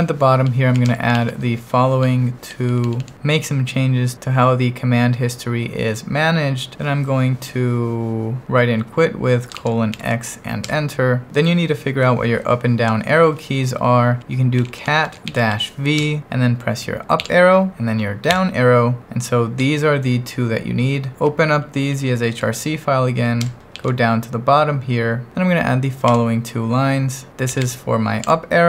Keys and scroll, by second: 0.0-2.7 typing, 9.6 shift+;, 10.0 x, 10.7 Return, 14.4-16.0 typing, 16.0 Return, 17.2 Up, 18.3 Down, 21.5 Up, 23.4 Return, 23.7 shift+g, 26.1-28.3 typing.